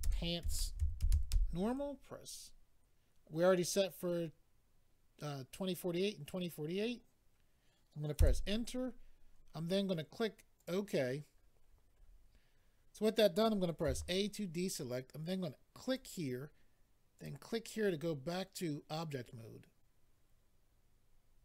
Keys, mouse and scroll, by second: 0.0-1.3 typing, 8.1 Return, 10.5 click, 11.6-12.2 scroll down 6, 15.8 click, 15.9 click, 17.1 click, 17.2 click.